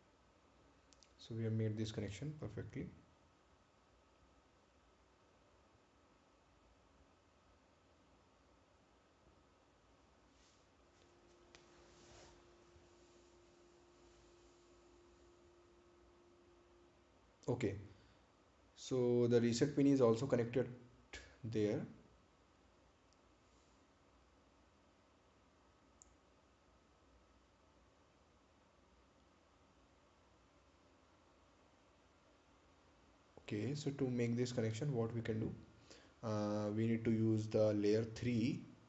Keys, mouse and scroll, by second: 2.0 scroll down 1, 6.3-7.6 scroll up 1, 8.4-9.2 scroll down 1, 9.8-10.2 scroll up 1, 10.2 scroll down 1, 11.2-11.5 scroll up 1, 11.5 scroll down 1, 15.0-15.5 scroll up 1, 15.5 scroll down 1, 18.1-18.9 scroll down 1, 19.8-20.2 scroll up 1, 20.4-20.8 scroll down 1, 24.3 scroll down 1, 24.7-26.3 scroll up 1, 29.1 right click.